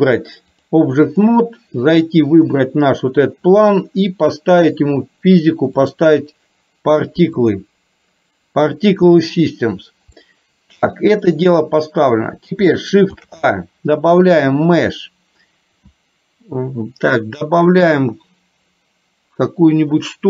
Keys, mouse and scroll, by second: 0.6 click, 2.1 click, 5.8 click, 7.5 click, 10.3 shift+middle click, 13.3 shift+a.